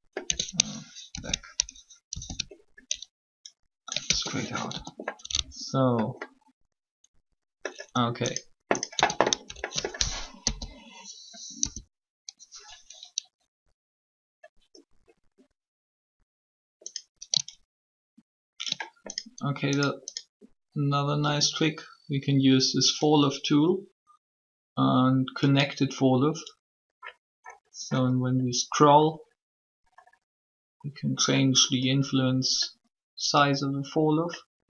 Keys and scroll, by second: 0.2 Tab, 4.0 ctrl+Tab, 4.6 a, 8.9 Tab, 10.4 shift+1, 11.5 6.